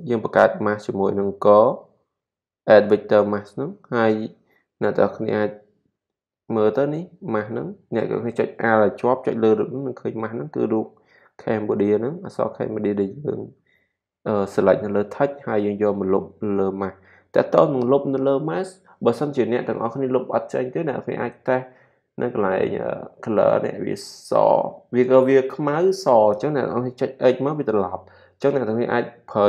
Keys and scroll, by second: 27.6-29.0 typing.